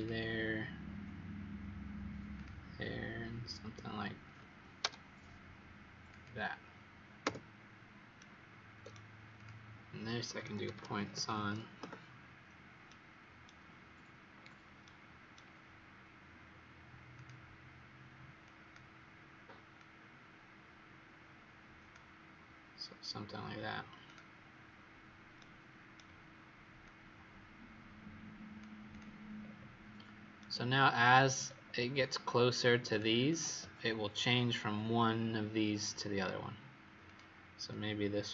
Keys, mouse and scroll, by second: 4.7 F8, 6.0 click, 7.2 Return, 8.1 right click, 9.3 click, 10.3-11.8 typing, 12.8 right click, 14.3-15.2 scroll up 3, 14.8 right click, 17.1 click, 25.3 right click, 26.8 click, 29.3-30.3 scroll down 2, 30.3 right click, 31.4-32.1 scroll down 3, 32.1-32.8 scroll up 1, 32.8-33.2 scroll up 2, 37.0 click, 37.6 click.